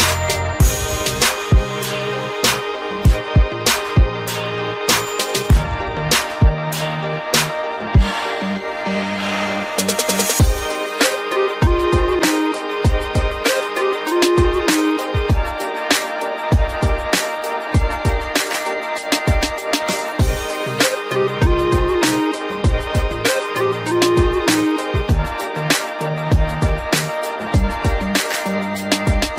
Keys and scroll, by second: 25.2 ctrl+g, 26.3 ctrl+alt+shift+e.